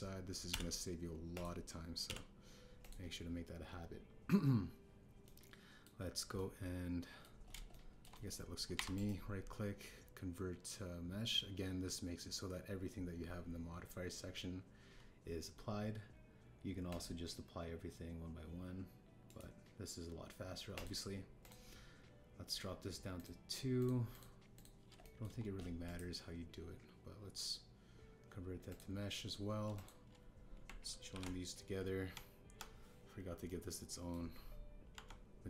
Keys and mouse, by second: 0.0 click, 1.4 h, 2.3 click, 3.0 h, 3.8 click, 6.2-6.8 middle drag, 7.3-8.2 drag, 8.6 shift+middle drag, 9.1 middle click, 9.7 KP_1, 12.7-13.4 drag, 17.8-20.1 middle drag, 20.3-21.8 drag, 22.4 click, 24.1 click, 25.5 click, 26.0 shift+middle drag, 26.8-29.7 drag, 30.7 shift+click, 32.1 ctrl+j, 33.1 Tab, 34.4 click.